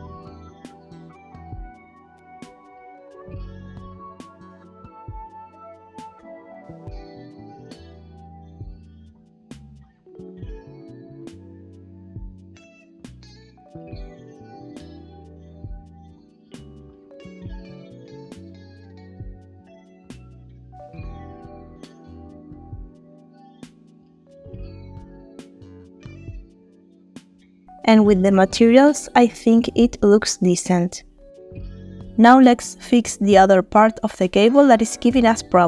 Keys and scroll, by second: 1.8 space, 5.9 space, 25.7 space, 27.7 space, 31.3 space.